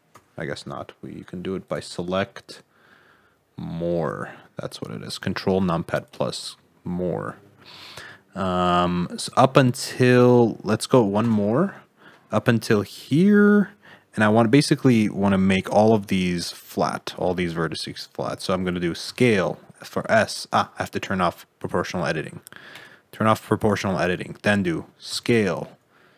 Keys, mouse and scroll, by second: 1.6 click, 11.2 ctrl+KP_Add, 19.0 s, 22.7 click, 25.1 s.